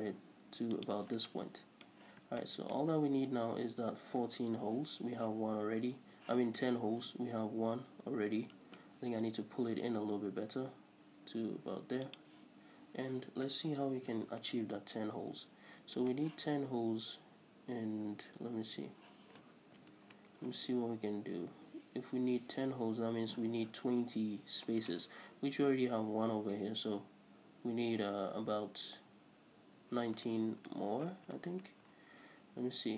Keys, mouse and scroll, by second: 1.0 click, 1.4-12.3 shift+middle drag, 9.7 g, 12.3 click, 14.0 ctrl+r, 16.2 right click, 19.9 ctrl+r, 25.0 right click, 31.3 ctrl+r.